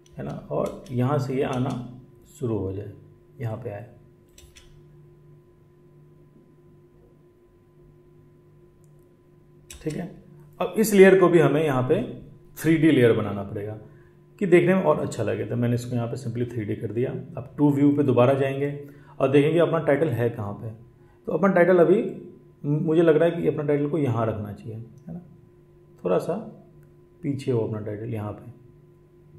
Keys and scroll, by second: 0.1 space, 0.5 space, 4.4 space, 9.7 space.